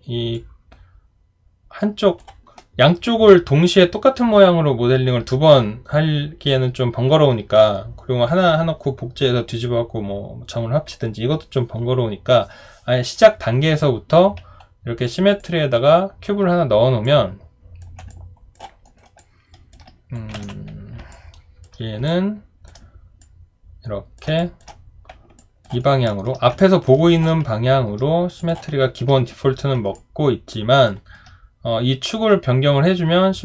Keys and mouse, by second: 18.1 alt+click, 18.8 alt+right click, 19.2 alt+click, 21.1 alt+click, 22.1 alt+click, 24.4 alt+click, 25.4 alt+click, 25.8 alt+right click, 26.1 alt+middle click, 29.9 alt+click.